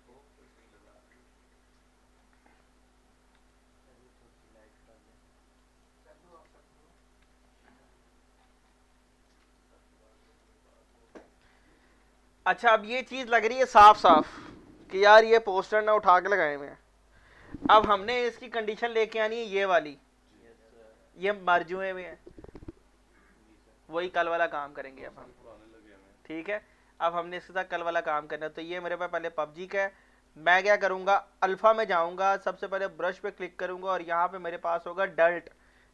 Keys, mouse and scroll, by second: 2.2 alt+shift+middle click, 3.4 shift+click, 4.8 shift+F3, 5.6 alt+shift+click, 7.2 F2, 7.7 scroll up 1, 8.4 scroll down 1, 8.9 alt+click, 9.7 shift+right click, 10.7 alt+click, 11.1 alt+middle click, 11.2 alt+middle click, 11.5 scroll down 1, 11.8 scroll up 1, 12.2 alt+middle click, 18.7 right click, 18.9 right click, 19.5 scroll up 1, 20.3-23.3 middle drag, 25.5 scroll down 1, 26.5 right click, 27.6 scroll up 1, 29.0 click, 29.7-31.5 scroll down 1, 31.5 click, 32.2 click, 34.0 scroll down 1.